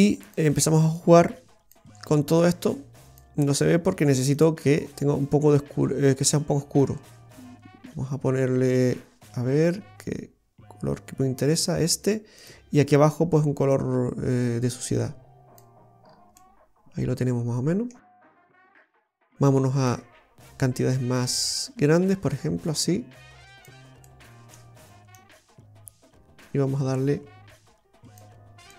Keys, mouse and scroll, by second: 0.1 click, 1.0 click, 2.6 click, 12.5 click, 16.5 middle click, 16.5-17.5 scroll up 2, 18.6-19.2 scroll up 3, 19.9 click, 19.9 scroll up 1, 24.2 middle click, 25.3 click, 28.5-28.7 scroll down 2.